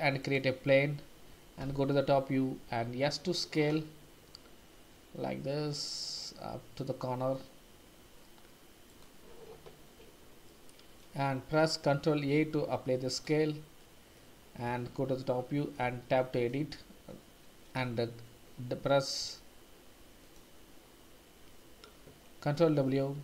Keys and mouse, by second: 1.6 KP_7, 2.7 s, 10.5-11.0 middle drag, 12.3 ctrl+a, 13.8-14.1 middle drag, 15.2 KP_7, 15.7 Tab, 19.2 w, 20.2 click, 22.5 ctrl+w.